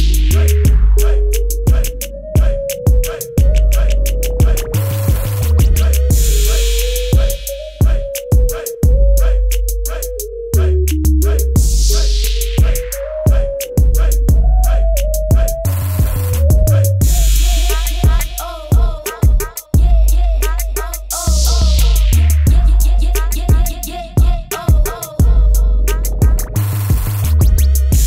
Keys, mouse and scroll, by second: 5.0 e, 5.5 click, 9.2 right click, 11.7 click, 12.6 ctrl+t, 13.4 click, 14.7 click, 15.3 shift+click, 16.5 click, 17.8 KP_Enter, 18.0 Up, 18.4 Right, 18.6 Up, 19.2 ctrl+alt+click, 20.4 ctrl+t, 21.4 shift+click, 22.1 click, 22.9 Return, 23.2 ctrl+KP_0, 23.3 ctrl+Right, 24.1 click, 24.4 ctrl+-, 25.0 click, 26.0 Left, 26.4 click.